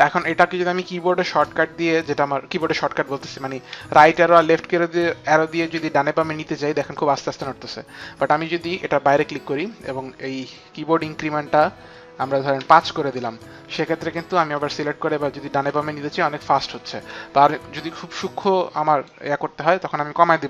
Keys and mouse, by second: 1.3 Right, 1.3 click, 3.4 Right, 5.7 Left, 9.0 click, 9.9 click, 10.1 click, 12.5 KP_5, 13.0 Return, 13.5 Right, 14.2 click, 14.5 Right, 16.9 Right, 16.9 Left, 16.9 click, 19.9 click.